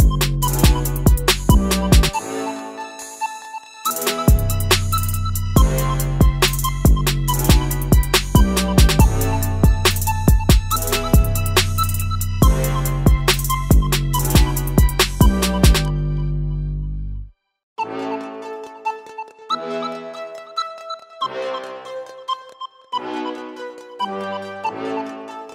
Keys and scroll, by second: 20.5 typing, 21.0 Return.